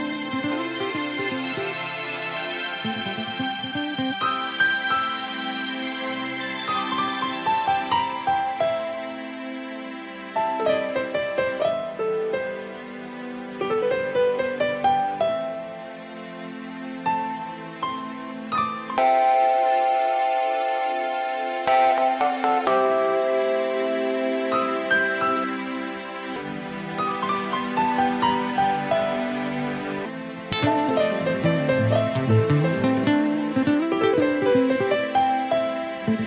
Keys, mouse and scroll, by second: 6.3 click, 11.1 click, 14.2 click, 23.8 click, 24.7 click, 26.9 click, 33.1 click, 35.0 middle click.